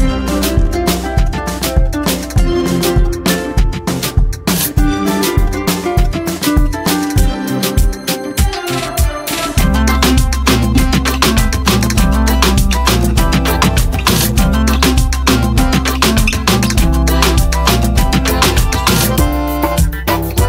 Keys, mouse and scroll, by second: 0.3 click, 0.4 space, 1.8 click, 2.9 v, 3.1 v, 3.9 ctrl+space, 5.4 ctrl+space, 6.9 scroll up 1, 8.5 ctrl+click, 8.5-10.4 ctrl+space, 9.4 ctrl+space, 9.9 ctrl+space, 12.8 scroll up 1, 15.6 click, 20.1 click.